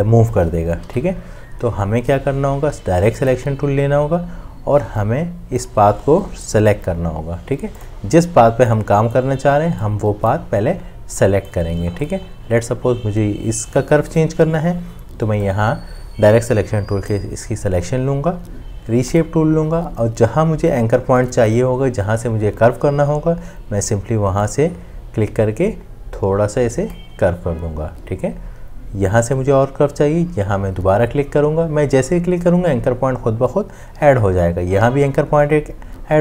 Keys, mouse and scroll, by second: 0.9 ctrl+z.